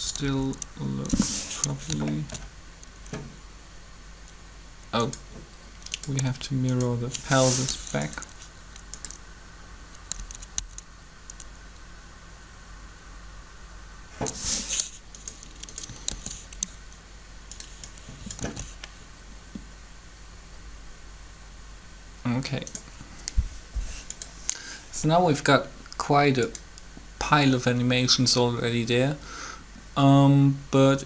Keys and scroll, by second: 0.2 Up, 10.0 Up, 10.6 Up, 16.1 shift+d, 18.4 alt+a.